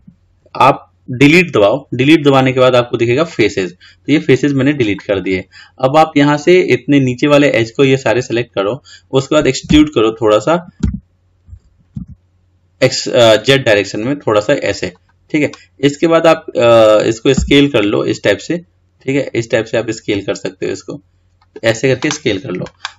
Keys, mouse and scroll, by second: 1.4 Delete, 7.6 click, 9.9 e.